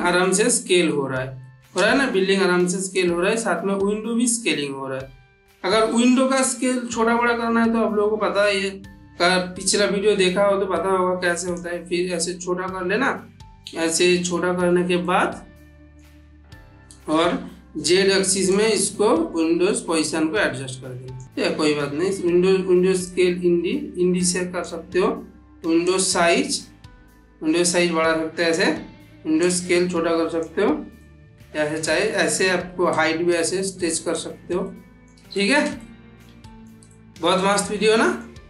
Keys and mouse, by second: 2.8-4.3 drag, 4.5-6.6 middle drag, 9.5-11.7 drag, 14.9-15.8 middle drag, 18.4-21.2 drag, 22.9-24.8 drag, 25.7-28.5 drag, 29.3-30.5 drag, 30.8-31.8 middle drag, 32.8-34.0 drag, 34.5-35.1 middle drag, 36.8-38.3 middle drag.